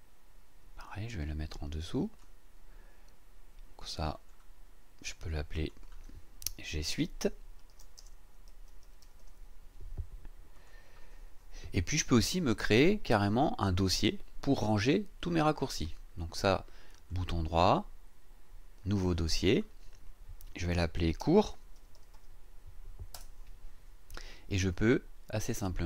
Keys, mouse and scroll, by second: 0.9-2.4 drag, 4.2 click, 5.6 click, 7.7-9.7 typing, 10.5 click, 16.9 click, 19.3 click, 21.0-22.6 typing, 23.1 Return.